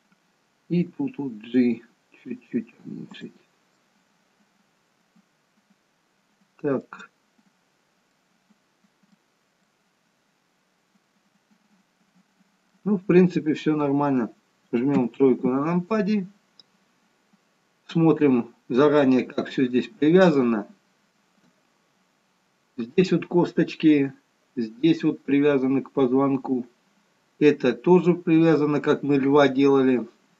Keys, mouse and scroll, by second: 1.0 g, 3.9 middle click, 8.3 middle click, 9.7 middle click, 15.1 KP_3, 16.1-16.9 scroll down 3, 18.1-19.0 scroll up 4, 19.2 shift+middle click.